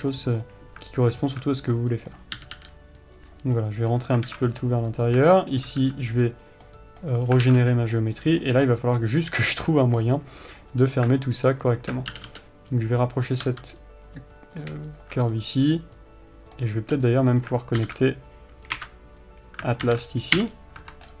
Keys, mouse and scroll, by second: 0.5-1.6 middle drag, 1.6 alt+click, 2.1-4.8 middle drag, 2.8 g, 4.6 alt+a, 4.8 click, 5.3 click, 5.9 shift+click, 6.2 f, 6.8 scroll down 1, 7.0-11.1 middle drag, 7.6 scroll up 1, 7.8 alt+a, 8.5 scroll up 1, 9.7 scroll down 1, 10.4-11.1 scroll up 1, 11.1 click, 11.7 alt+click, 12.5 g, 14.9 click, 15.8-21.2 middle drag, 20.8 alt+m.